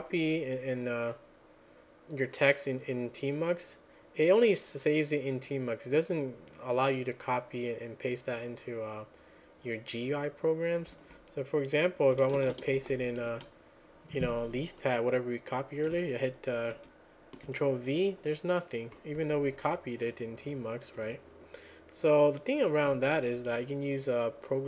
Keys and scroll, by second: 12.4-13.5 typing, 19.2 ctrl+v.